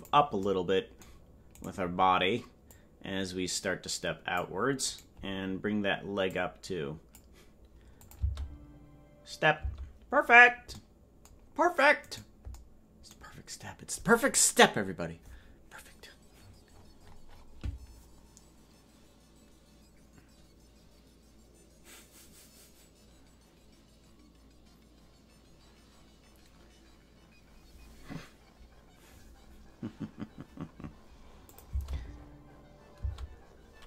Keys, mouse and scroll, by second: 1.6 right click, 2.7-5.0 drag, 5.0 right click, 6.3 click, 8.1-9.8 drag, 8.2 space, 9.7 space, 12.2 right click, 31.5 click, 31.7 space.